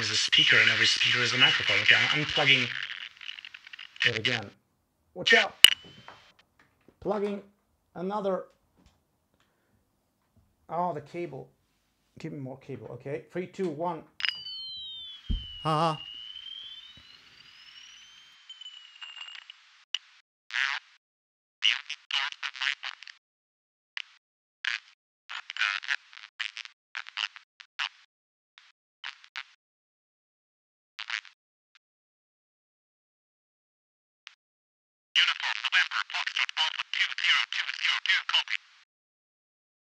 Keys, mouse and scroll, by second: 18.3 click, 31.3 click, 31.5-32.0 scroll up 2, 33.7 shift+space.